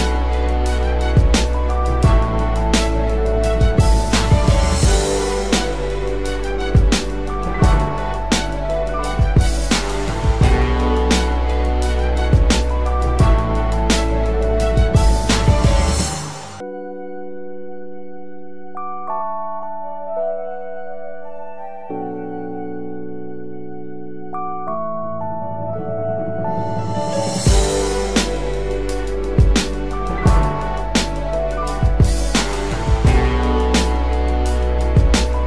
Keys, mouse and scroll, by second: 1.0-2.8 typing, 20.0 space.